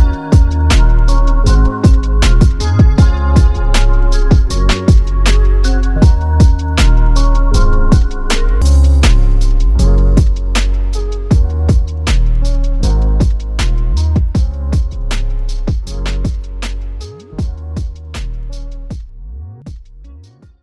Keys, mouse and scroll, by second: 4.7 click, 6.7 click, 8.2 5, 8.8 click, 11.8 click, 13.5 ctrl+click, 15.5 space.